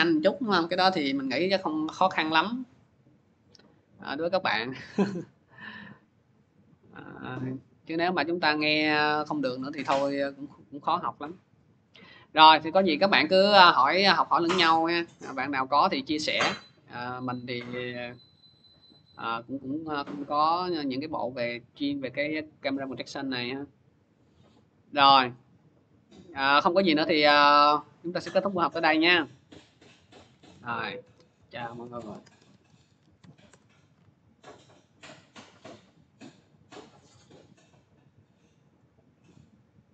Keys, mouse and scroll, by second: 4.3 click, 6.4 click, 9.2 click, 11.3 click, 14.2-16.5 drag, 17.6-23.9 drag, 25.2-27.4 drag, 29.4 click, 30.0-33.5 typing, 38.4 typing, 38.6 click, 39.3 click, 39.3 click.